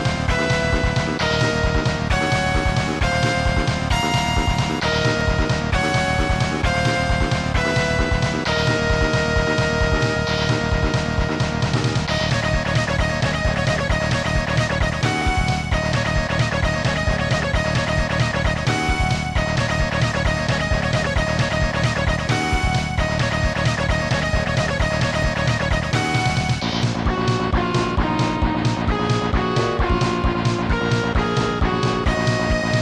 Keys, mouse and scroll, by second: 0.1 click, 0.5 typing, 1.1 click, 5.0 scroll down 1, 5.7 scroll down 1, 7.3 click, 7.8 click, 8.1 click, 9.1 click, 11.4 s, 12.5 click, 13.0 ctrl+z, 13.5 click, 14.2 click, 14.6 s, 16.0 scroll up 1, 24.1 click, 25.6 ctrl+z, 26.2 s, 26.9 scroll up 2, 27.9 scroll up 1, 30.7 scroll up 1.